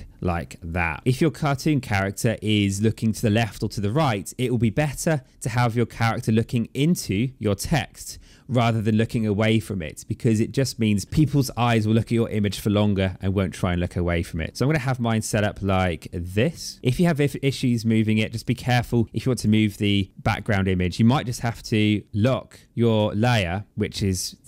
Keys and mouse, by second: 0.5 click, 2.8 click, 5.1 click, 7.9 click, 10.0 click, 13.7 click, 16.3 click, 17.4 click, 19.0 click, 21.9 click, 22.7 click, 23.4 click.